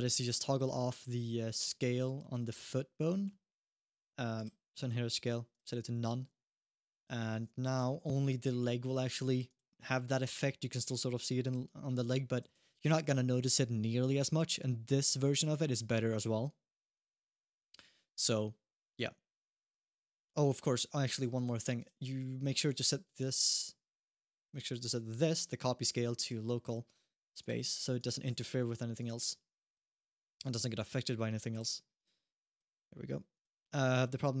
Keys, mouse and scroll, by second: 0.2-0.7 scroll down 3, 1.4 middle click, 2.0 shift+middle click, 2.9 middle click, 4.1 click, 5.7-6.4 scroll down 2, 6.7 click, 7.2-7.6 scroll up 2, 7.6 g, 10.0 g, 12.3 alt+g, 17.0 g, 19.9 click, 19.9 middle click, 19.9 g, 20.1-20.8 scroll up 1, 20.9 click, 21.1 click, 21.6 click, 22.4 click, 24.1 click, 26.0 click, 27.2 click, 28.0 scroll down 1, 28.3 shift+middle click, 28.8 click, 28.9 click, 29.4 click, 30.5 click, 31.7 click, 32.5-33.1 scroll down 2, 33.1 click, 33.6 middle click, 34.0-34.4 scroll up 1.